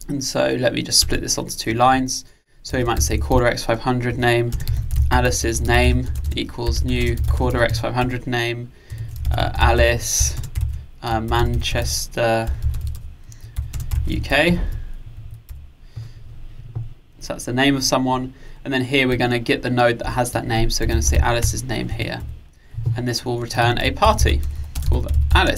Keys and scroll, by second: 4.2 Return, 21.5 Return.